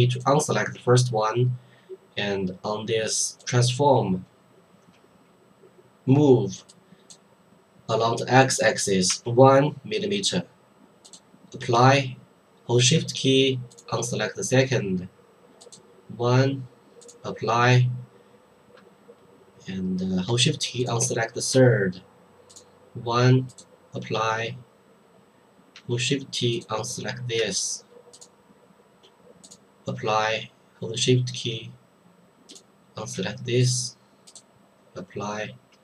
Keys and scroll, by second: 9.1 1.